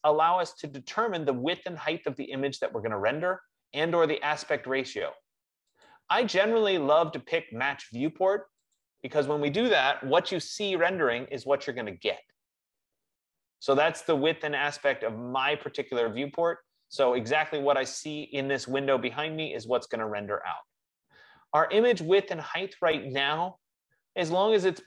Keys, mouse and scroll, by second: 6.0 click, 9.0 click, 22.5 F15.